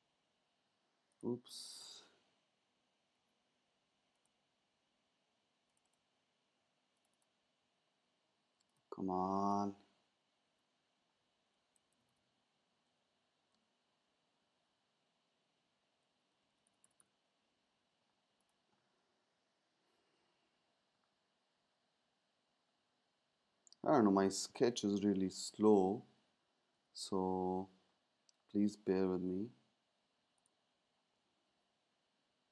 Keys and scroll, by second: 3.1 super+z, 9.3 super+z, 11.7 super+z, 16.4 super+z, 16.9 super+z, 25.1 shift+super+z, 26.8 super+z, 29.0 super+z, 31.6 shift+super+z.